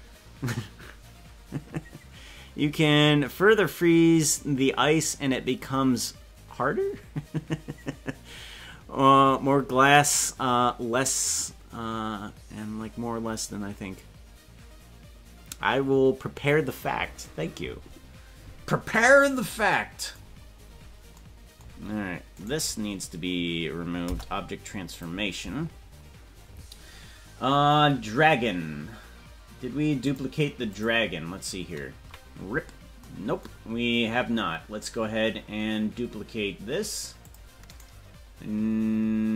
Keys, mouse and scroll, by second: 20.4 scroll up 1, 21.1 scroll up 9, 22.3-24.0 right drag, 24.0 Delete, 27.8 scroll down 1, 30.0 scroll down 4, 30.0 click, 30.7 click, 32.0 KP_Decimal, 37.2 drag, 38.0-39.3 right drag.